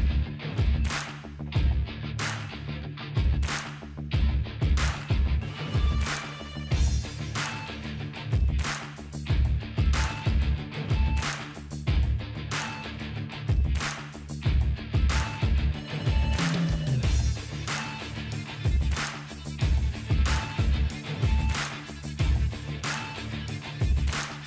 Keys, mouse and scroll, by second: 12.4-13.6 drag, 14.9-16.9 drag.